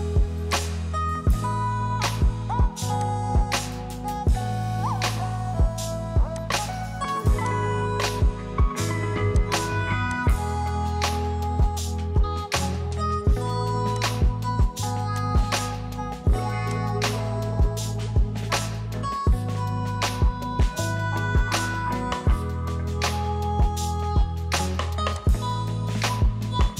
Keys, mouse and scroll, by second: 3.2-6.7 drag, 14.0 click, 15.2 typing.